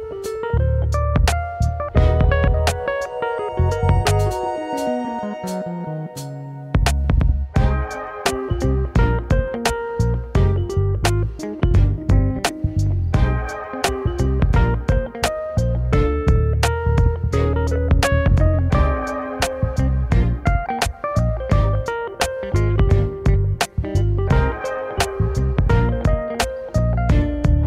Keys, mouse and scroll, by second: 0.0 KP_1, 0.6-2.7 shift+middle drag, 2.7 e, 4.7 scroll up 2, 6.0 e, 7.9 s, 10.0 e, 11.9 s, 15.4 ctrl+r, 16.4 s, 17.8-22.0 typing, 18.5 click, 19.0 scroll down 3, 23.0 KP_1, 23.6-24.0 scroll up 2, 24.5 e, 26.7 middle click, 27.2-27.5 scroll up 2.